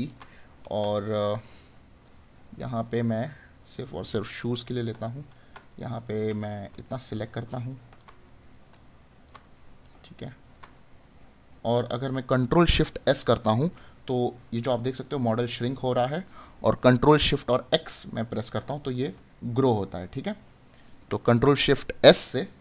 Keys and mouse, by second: 0.4 right click, 4.0 right click, 8.2 right click.